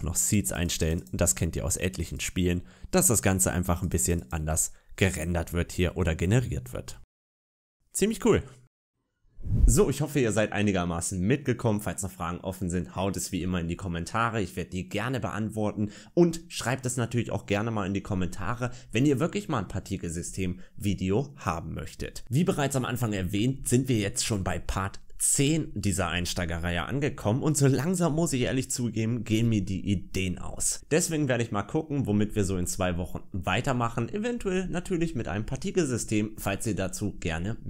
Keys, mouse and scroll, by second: 0.1 click, 0.3-0.8 click, 0.5 click, 0.6 click, 2.0-4.0 click, 3.7 click, 3.9 click, 5.3-5.7 scroll down 2, 5.7 middle click, 6.2-7.0 scroll up 1, 7.0 middle click.